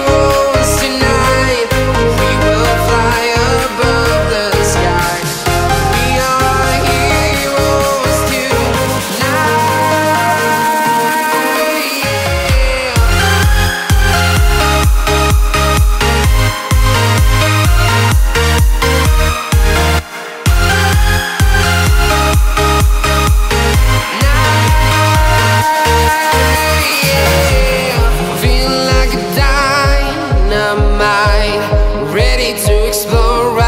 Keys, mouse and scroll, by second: 1.4 click, 4.7-5.1 scroll up 1, 6.8 shift+click, 9.6 shift+click, 9.8-10.1 scroll down 1, 10.1 scroll up 1, 11.1-11.5 scroll down 1, 11.7-12.0 scroll up 1, 14.1 shift+click, 15.7 shift+click, 15.9-16.2 scroll down 1, 19.9 scroll up 1, 21.6 shift+click, 23.9 shift+click, 24.3 right click, 24.6 scroll down 1, 24.9 scroll up 1, 25.3-26.6 drag, 26.6-28.2 shift+drag, 28.2 ctrl+z, 28.7-31.1 shift+drag, 31.3-31.8 scroll down 1, 31.8 scroll up 1, 32.7 click.